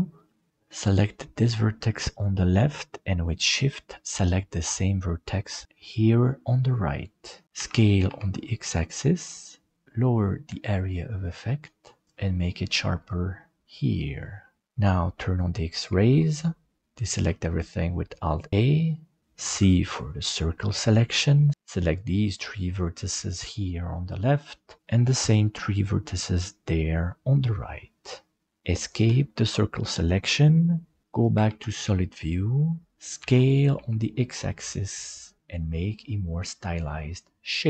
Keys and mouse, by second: 2.0 right click, 5.7 shift+right click, 7.5 s, 15.8 alt+z, 17.2 alt+a, 19.5 c, 31.4 alt+z, 33.2 s.